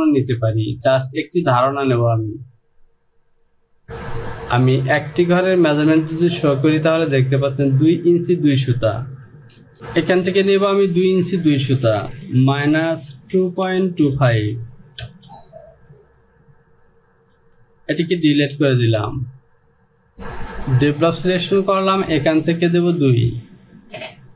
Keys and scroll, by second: 3.8 Home, 5.9 space, 12.6 Down, 12.6 KP_Subtract, 13.4 KP_2, 13.7 KP_Decimal, 14.1 KP_2, 14.4 KP_5, 15.1 Return, 17.4 Delete.